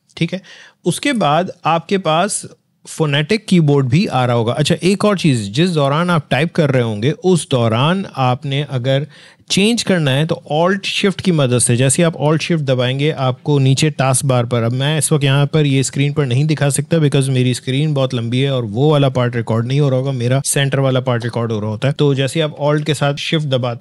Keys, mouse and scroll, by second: 1.0 click, 22.5 alt+Caps_Lock.